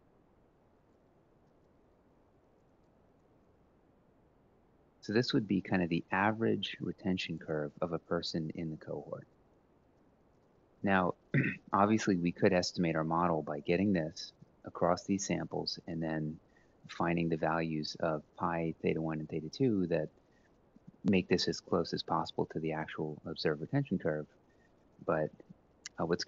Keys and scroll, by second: 0.0-0.5 typing, 0.7-1.4 shift+Right, 2.0 shift+Right, 2.4 ctrl+v, 23.0 Left.